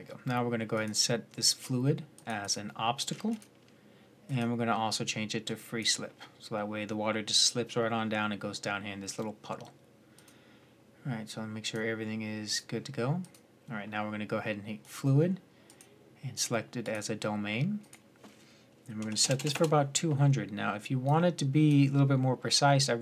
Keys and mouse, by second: 0.6-7.8 drag, 13.5-17.7 drag, 19.2 KP_0, 20.8-22.8 drag, 22.8-23.0 middle drag.